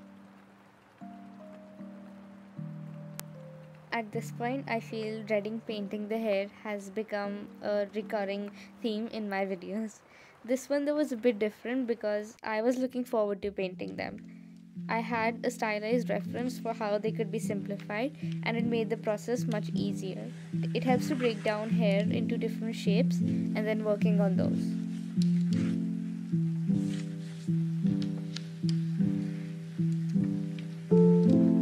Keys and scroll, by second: 8.1 ctrl+z, 8.3 space, 9.9 ctrl+z, 14.0 space, 24.0 space.